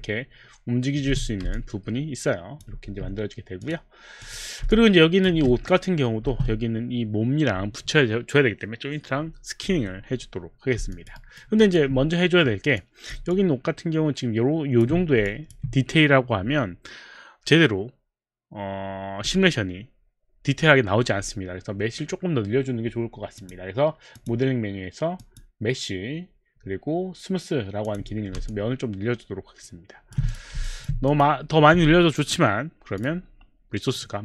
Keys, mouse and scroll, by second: 0.0 middle click, 0.0 w, 0.8 middle click, 1.1 z, 1.8 alt+click, 1.8 z, 2.8 q, 3.6 click, 4.2 click, 4.7 alt+click, 5.4 w, 5.6 middle click, 6.2 middle click, 6.2 z, 10.9 alt+click, 11.6 alt+click, 11.6 alt+right click, 12.8 click, 13.3 alt+click, 15.3 alt+click, 23.4 click, 24.2 click, 25.3 click, 27.9 click, 30.6 alt+click, 32.9 click.